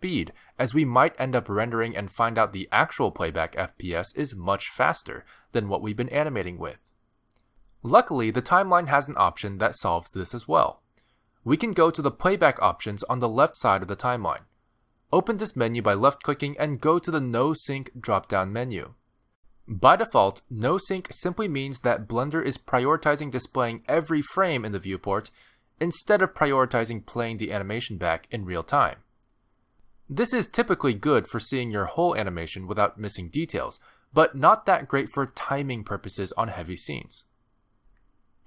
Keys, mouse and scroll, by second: 1.8 middle click, 3.2 middle click, 7.7 click, 10.5 click, 14.9 click.